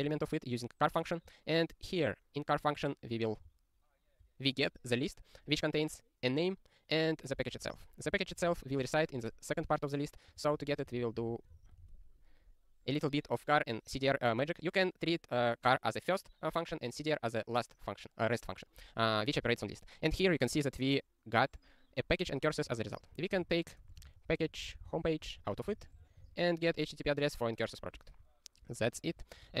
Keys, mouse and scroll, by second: 0.0 ctrl+e, 7.5-8.9 typing, 9.2 ctrl+e, 10.4 ctrl+a, 10.5-11.5 typing, 11.5 ctrl+e, 22.8 ctrl+a, 22.9-26.1 typing, 28.7 ctrl+space, 28.8 ctrl+a, 29.1 ctrl+w.